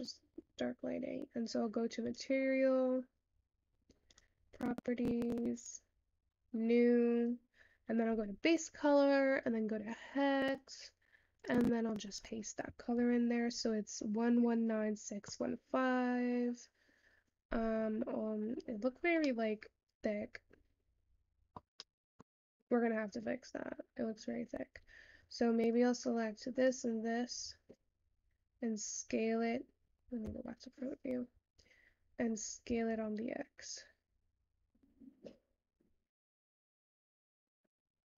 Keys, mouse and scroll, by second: 4.0 click, 5.3-9.1 drag, 10.5 click, 19.3-22.5 middle drag, 22.5 scroll up 4, 26.6 shift+click, 31.3 `.